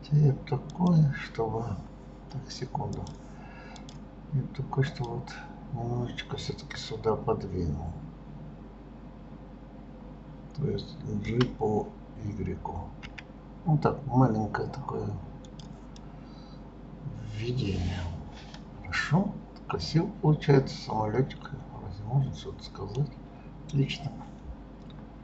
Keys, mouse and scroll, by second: 0.7 click, 3.0 click, 3.8 click, 4.9 click, 16.0-19.0 middle drag, 23.1-23.6 scroll down 2, 23.7 scroll up 1, 24.3-25.2 scroll up 1.